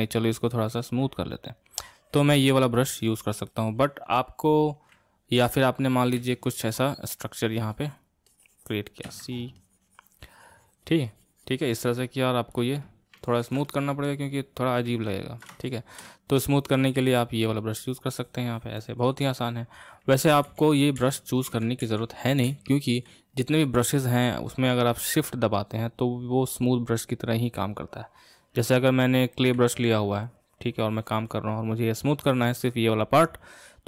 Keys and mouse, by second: 1.2-6.1 drag, 6.1 c, 6.7-9.0 drag, 9.0 c, 9.6-12.6 drag, 13.2-17.5 ctrl+middle drag, 17.5-20.3 drag, 20.3 ctrl+z, 20.5 ctrl+z, 21.1 ctrl+z, 21.9 ctrl+z, 22.6 ctrl+z, 29.5 c, 30.3-33.3 drag.